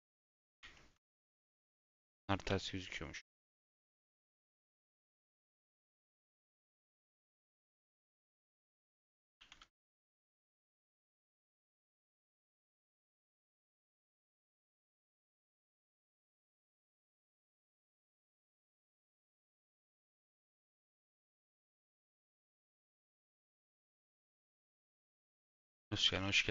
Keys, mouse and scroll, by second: 0.5-2.4 scroll up 1, 2.4-4.1 scroll up 1, 4.1-4.7 scroll up 1, 4.7-5.2 scroll up 1, 5.2-6.4 scroll up 1, 6.4-7.5 scroll up 1, 7.5-8.1 scroll up 1, 8.1-8.8 scroll up 1, 8.8-10.8 scroll up 1, 10.8-11.9 scroll up 1, 11.9-13.0 scroll up 1, 13.0-14.3 scroll up 1, 14.3-16.1 scroll up 1, 16.1 /, 16.6 /, 21.1-26.1 drag.